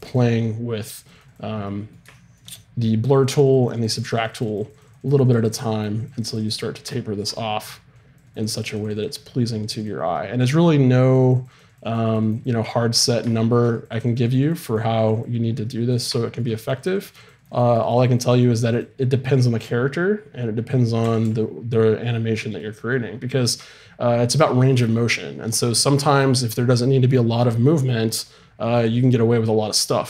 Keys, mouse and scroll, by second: 1.6 middle click, 6.9-12.1 middle drag, 21.0 r.